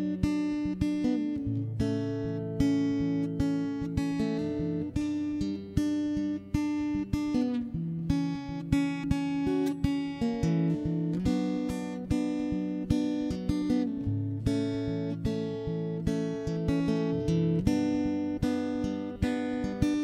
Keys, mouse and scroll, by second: 0.5 middle click, 0.9 ctrl+l, 1.1 ctrl+i, 1.4 c, 2.1 shift+space, 2.3 middle click, 2.8 shift+space, 3.2 r, 4.6-5.7 middle drag, 6.3 Tab, 6.4 middle click, 6.8 alt+h, 6.9 middle click, 7.1 right click, 7.5 middle click, 7.7 click, 7.8 shift+space, 8.3-9.6 drag, 10.0 n, 10.1 t, 10.5 click, 11.1 middle click, 11.7 middle click, 12.7 ctrl+s, 12.8 middle click, 14.2 0, 14.4 right click, 14.6 x, 15.0 1, 15.2 right click, 16.2 shift+d, 16.5 m, 16.9 right click, 17.4 click, 18.0 Tab, 18.6 a, 18.8 a, 19.0 c.